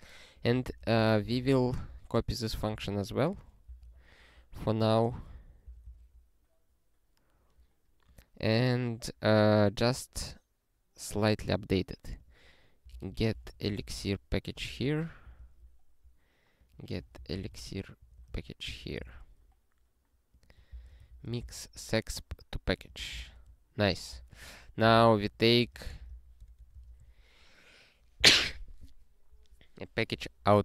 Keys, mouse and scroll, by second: 0.3 click, 0.5 ctrl+a, 1.0 ctrl+alt+@, 1.3 alt+w, 2.0 scroll down 1, 3.3 click, 3.6 Return, 3.8 ctrl+y, 5.3 ctrl+n, 5.7 ctrl+j, 6.2 scroll up 1, 6.7 scroll down 1, 8.1 click, 12.2 click, 12.9 alt+b, 13.1-14.5 typing, 14.8 alt+f, 15.2 alt+d, 16.5 click, 16.7-18.5 typing, 18.6 alt+d, 19.1 ctrl+s, 20.1 click, 20.7 ctrl+b, 21.0 alt+d, 21.5 ctrl+s, 22.7 click, 23.3 ctrl+e, 23.9 ctrl+n, 24.2-27.5 typing, 29.3 Up.